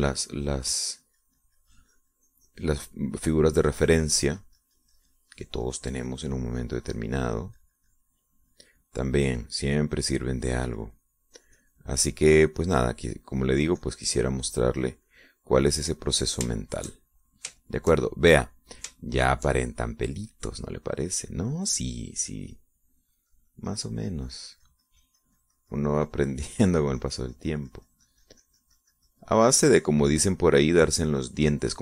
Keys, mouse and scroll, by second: 13.0-17.1 drag, 17.2 click, 18.1 shift+middle click, 19.2-20.3 shift+middle drag, 20.7 shift+middle click, 21.9 middle click, 24.3-31.7 drag.